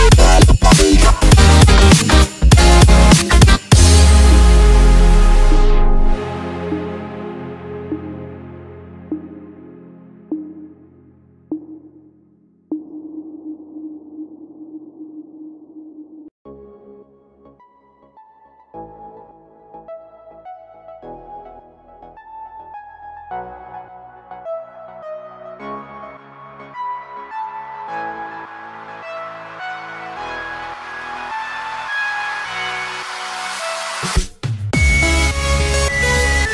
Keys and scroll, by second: 0.0-7.0 typing, 8.3-26.7 typing, 20.8 ctrl+space, 27.3 ctrl+space, 27.8-36.5 typing.